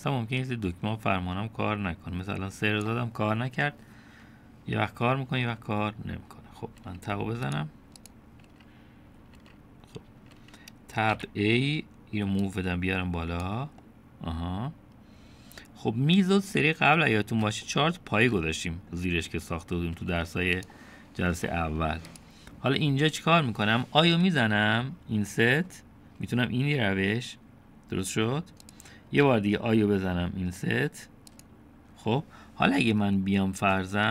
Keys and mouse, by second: 0.4-3.9 drag, 7.8 Tab, 9.0 click, 9.5 Tab, 12.2 a, 13.4-14.7 drag, 14.8-17.5 drag, 17.5 middle click, 18.7 shift+middle click, 19.5 middle click, 21.0 Tab, 22.5 Tab, 23.1 click, 25.1 i.